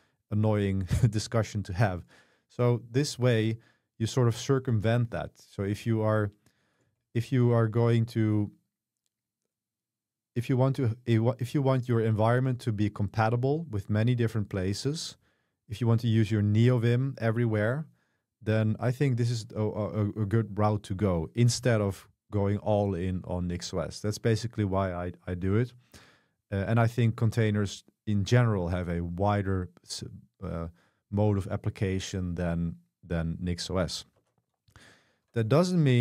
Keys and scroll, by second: 5.7 Escape, 6.9 shift+v, 20.3 Escape, 34.2 Escape, 35.7 super+1.